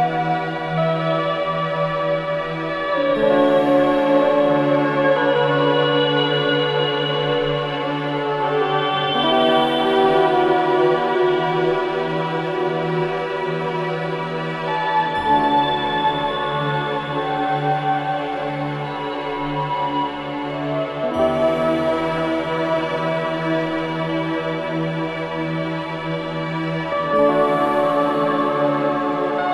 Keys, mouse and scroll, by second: 1.3-5.3 drag, 5.3-5.7 scroll down 1, 6.5 click, 7.0-7.4 scroll up 1, 11.7 scroll down 1, 12.1 click, 12.6-13.4 scroll down 1, 13.8 click, 16.0-16.4 scroll up 1, 17.5 middle click, 17.5 scroll down 1, 20.3 scroll down 1, 21.0 scroll up 1, 22.6-22.9 scroll down 1, 22.9-23.7 scroll up 1, 24.4-24.9 scroll up 1, 24.9-25.3 scroll down 1, 25.5 scroll up 1, 26.9 scroll down 1, 27.3 scroll up 1, 28.6-28.9 scroll down 1, 29.3 scroll up 1.